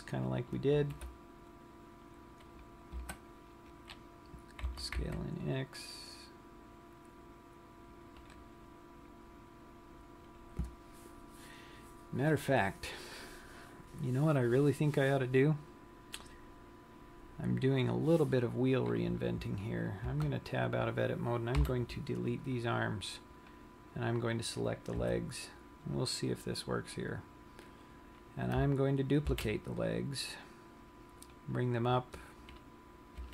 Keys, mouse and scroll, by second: 1.2 ctrl+r, 5.2 s, 9.1 click, 9.7 scroll down 1, 21.1 Tab, 22.0 Delete, 24.1 click, 25.6 KP_3, 27.0 scroll down 1, 28.2-28.9 scroll up 3, 30.1 shift+d, 32.0 click.